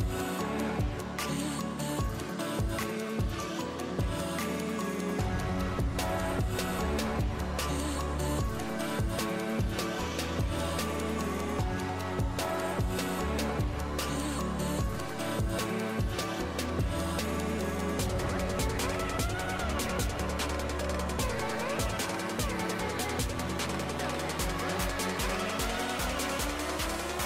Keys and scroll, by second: 21.1-23.3 typing, 24.5 6, 26.7 c.